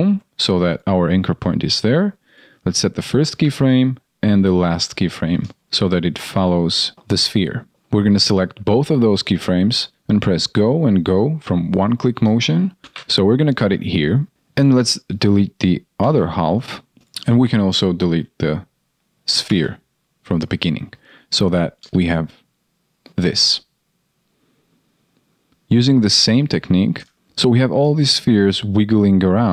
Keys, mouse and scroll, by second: 6.0 shift+right click, 7.1 shift+click, 12.8 ctrl+shift+d, 26.9 ctrl+a.